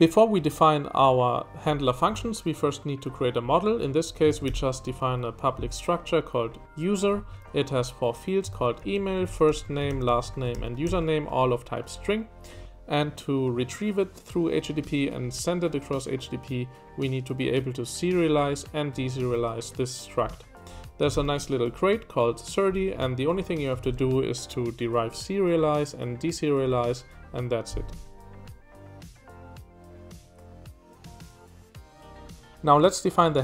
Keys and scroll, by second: 3.7-5.0 typing, 7.1 Escape, 7.5-10.8 typing, 20.4 k, 21.1 shift+v, 23.0 Escape, 23.2 j, 23.4 j, 23.5 j.